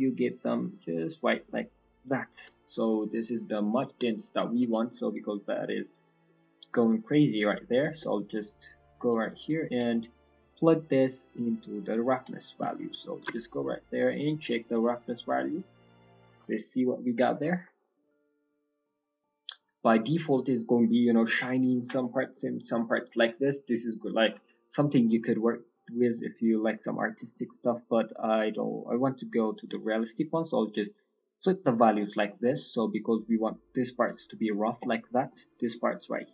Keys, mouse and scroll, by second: 0.3 click, 2.3-3.3 scroll down 6, 2.9 middle click, 3.4 scroll down 2, 4.2-5.2 scroll up 4, 5.6 middle click, 5.9 scroll down 4, 6.2 middle click, 6.6-7.1 scroll down 2, 7.1 click, 8.0 middle click, 8.7 middle click, 9.4 click, 9.8 middle click, 10.1-10.5 scroll up 1, 10.8 click, 12.4 middle click, 13.1 ctrl+shift+click, 13.7-14.4 scroll down 4, 14.4 middle click, 14.8 middle click, 15.0-16.3 scroll up 6, 15.3 middle click, 19.5-19.9 scroll down 7, 20.2-21.6 scroll up 6, 20.6 middle click, 21.2 middle click, 22.3 middle click, 22.8 middle click, 23.3 scroll down 1, 23.4 middle click, 23.9 middle click, 24.3-25.1 scroll up 4, 25.4 middle click, 25.6-26.1 scroll up 2, 26.1 middle click, 26.3-27.0 scroll up 2, 27.1 middle click, 27.3-28.4 scroll up 6, 28.4 click, 29.8 middle click, 31.1-31.5 scroll up 1, 31.5 middle click, 31.7-32.3 scroll down 5, 31.9 middle click, 32.3-33.3 scroll up 8.